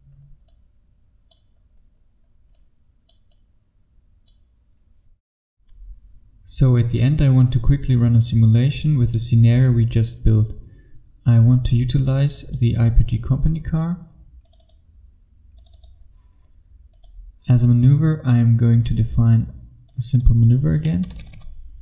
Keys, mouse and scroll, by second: 0.5 click, 1.6-2.7 scroll down 1, 2.7 click, 6.2 F1, 12.4 click, 21.1 KP_9.